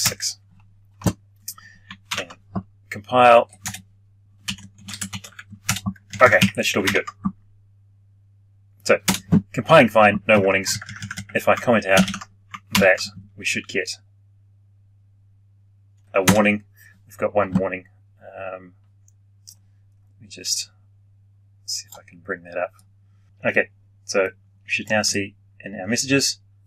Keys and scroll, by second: 2.0 ctrl+F9, 11.9 ctrl+/, 14.2 ctrl+F9.